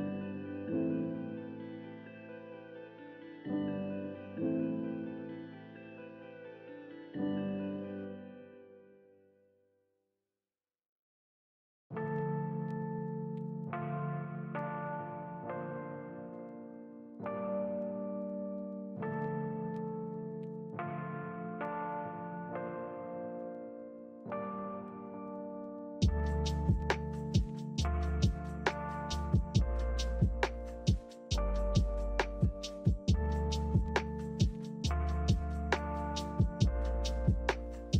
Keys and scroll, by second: 21.6 a, 34.4 5.